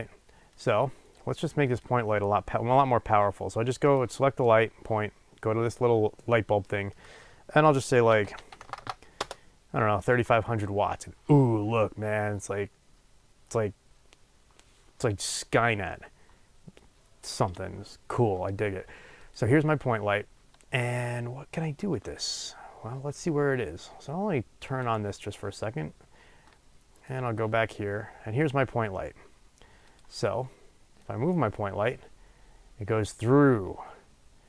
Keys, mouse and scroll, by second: 9.2-19.3 drag, 9.2 KP_0, 9.3 Return, 24.6 click, 26.5-29.9 middle drag, 27.1 scroll up 2, 27.3-28.5 scroll down 2, 28.5-29.9 scroll up 2, 29.9 click, 31.0-34.4 drag.